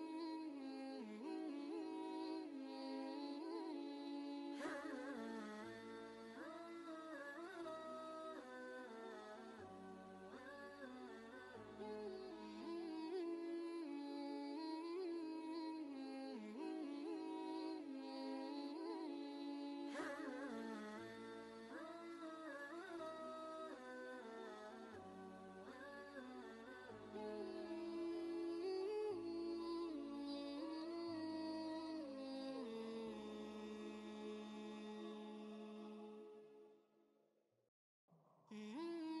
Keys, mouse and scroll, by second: 0.9 typing, 7.5 click, 7.6 click, 10.1 5, 12.7 5, 15.4 click, 17.0-28.1 shift+drag, 29.0 ctrl+space, 29.1 ctrl+click, 31.9 Left.